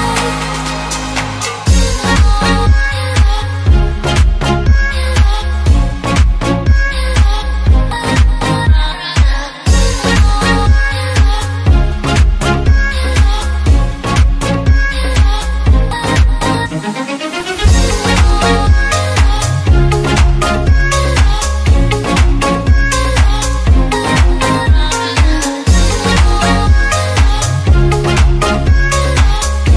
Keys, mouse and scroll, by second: 1.0-1.4 scroll up 2, 1.4 scroll down 2, 1.5 scroll up 2, 1.9 alt+d, 2.8 click, 3.0 alt+d, 4.3 click, 4.5 alt+d, 5.3 click, 5.4 alt+d, 5.6 click, 5.6 alt+d, 5.8 click, 5.8 alt+d, 6.1 click, 6.1 alt+d, 6.3 click, 6.4 alt+d, 6.5 click, 6.6 alt+d, 6.8 click, 6.9 r, 7.0 click, 7.1 g, 7.2 click, 7.3 alt+d, 7.5 click, 7.6 alt+d, 7.8 click, 8.0 alt+d, 8.1 click, 8.3 alt+d, 8.7 click, 8.7 alt+d, 9.1 click, 9.2 alt+d, 9.3 click, 9.3 r, 9.5 click, 9.5 g, 9.7 click, 9.8 alt+d, 10.0 click, 10.1 alt+d, 10.3 click, 10.3 alt+d, 10.6 click, 10.6 alt+d, 10.8 click, 10.8 alt+d, 11.0 click, 11.1 alt+d, 11.3 click, 11.4 alt+d, 11.6 click, 11.7 alt+d, 11.9 click, 12.0 alt+d, 12.2 click, 12.4 alt+d, 12.5 click, 12.6 alt+d, 12.7 click, 12.9 alt+d, 13.0 click, 13.1-14.7 typing, 13.2 click, 13.4 alt+click, 13.5 alt+d, 13.6 click, 13.7 alt+d, 13.9 click, 14.2 click, 14.3 alt+d, 14.5 click, 14.9 click, 15.1 scroll down 1, 15.2 scroll up 1, 15.3 alt+a, 15.7 ctrl+s, 16.1 scroll down 2, 16.3-17.3 middle drag, 17.3 scroll down 2, 17.4-18.1 middle drag, 18.1 KP_1, 18.9 z, 19.7-21.0 shift+middle drag, 21.0 space, 29.2 space.